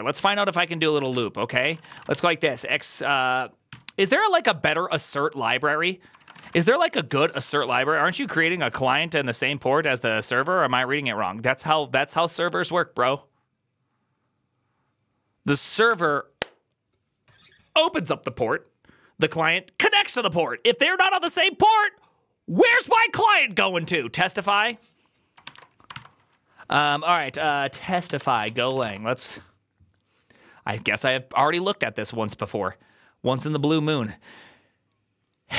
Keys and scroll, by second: 1.0-3.8 typing, 5.8-8.6 typing, 25.8 ctrl+t, 27.1-29.2 typing.